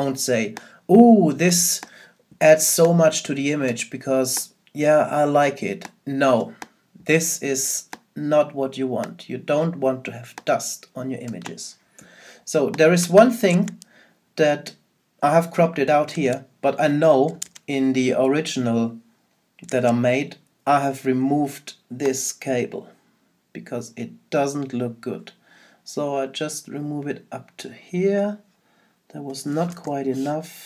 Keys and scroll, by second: 13.5 super+Tab, 16.1 super+Tab.